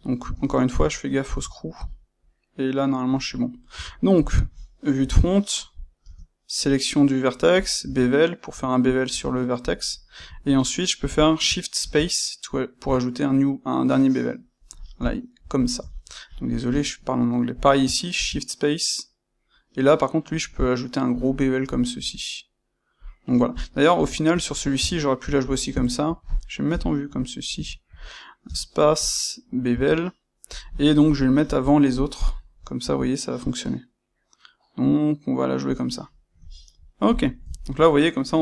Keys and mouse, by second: 0.1 space, 1.9 click, 3.1-4.1 middle drag, 3.6 Tab, 4.1 click, 5.0 KP_1, 6.0 space, 7.6 space, 15.5 click, 15.8-16.2 ctrl+middle drag, 16.2 click, 16.6 space, 23.4 middle click, 23.9 click, 24.7 Tab, 25.3 click, 25.7-37.1 ctrl+middle drag, 26.6 KP_1, 28.4 space, 29.2 space, 37.1 click, 37.3-38.4 ctrl+shift+middle drag.